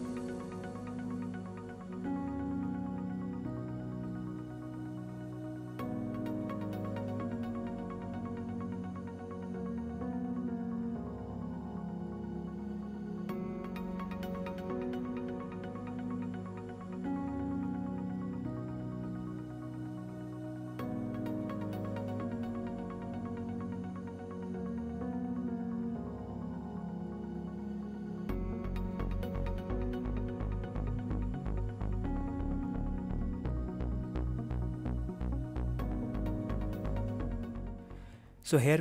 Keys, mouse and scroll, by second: 0.5-4.7 typing, 0.6 shift+click, 1.6 shift+click, 2.2 click, 2.3 shift+middle click, 2.5 click, 3.3 click, 3.6 click, 3.7 click, 4.1 shift+click, 4.5 click, 5.7 shift+click, 5.9-8.0 typing, 6.4 ctrl+z, 6.8 shift+click, 7.2 click, 7.9 shift+click, 9.9 click, 10.3 f, 10.5 shift+click, 10.6 f, 10.7 click, 10.9 g, 11.1 click, 11.3 shift+middle click, 11.6 shift+middle click, 11.8 click, 12.4 f, 12.7 click, 12.8 e, 13.3 shift+click, 13.4 f, 13.5 shift+click, 13.6 f, 14.8 shift+click, 14.9-17.6 typing, 15.5 click, 16.0 click, 16.6 shift+middle click, 16.7 click, 17.2 shift+click, 17.5 shift+click, 19.1 shift+middle click, 20.5 shift+middle click, 22.0 click, 22.1-26.3 typing, 22.8 shift+click, 23.3 click, 23.9 click, 24.5 shift+click, 25.5 click, 26.0 shift+middle click, 26.2 click, 26.5 click, 27.5 click, 27.6-32.9 typing, 28.6 click, 28.9 shift+click, 29.3 click, 29.8 shift+click, 30.5 click, 30.7 shift+click, 31.3 click, 31.6 shift+click, 32.0 click, 32.8 shift+click, 33.7 ctrl+z, 34.3 e, 34.5 Escape, 34.8 ctrl+z, 35.5 f, 35.5 shift+click, 35.6 f, 35.8 shift+click, 35.9 f, 36.0 shift+click, 36.1 f, 37.0 shift+click, 37.2-38.8 typing, 37.9 shift+click, 37.9 shift+middle click, 38.1 click.